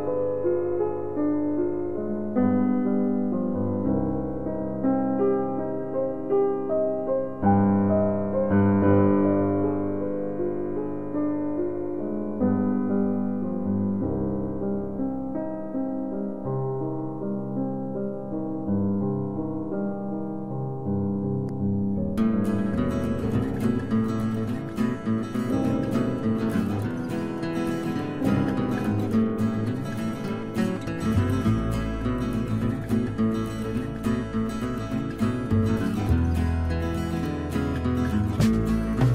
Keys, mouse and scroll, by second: 3.8 s, 6.1 z, 18.0 click, 20.2 g, 21.2 z, 27.6 click, 28.6-31.5 middle drag, 34.1 click, 37.2 shift+Num_Lock, 37.2 click.